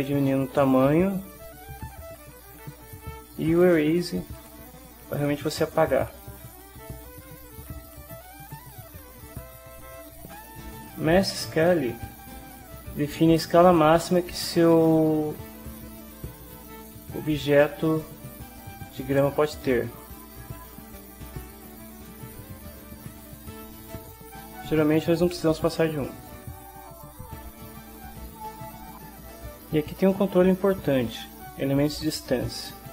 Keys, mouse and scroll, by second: 3.6 click, 4.4-6.1 right drag, 6.9 click, 7.4 click, 7.9 right click, 12.6-17.4 drag, 19.3-22.4 right drag, 23.2-25.2 drag, 26.0-28.8 right drag.